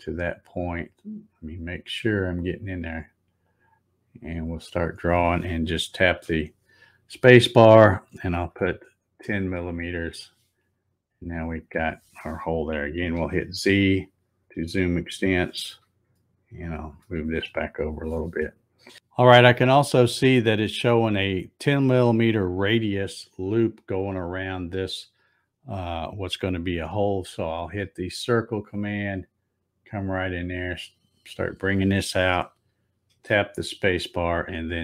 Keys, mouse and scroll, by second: 0.9-1.2 scroll up 3, 1.2-1.7 scroll down 4, 1.7-3.0 scroll up 10, 3.4-6.1 drag, 6.0 space, 11.0-11.6 scroll up 4, 13.1 z, 16.1 shift+middle click, 28.4 click, 30.2-33.2 drag, 33.1 space.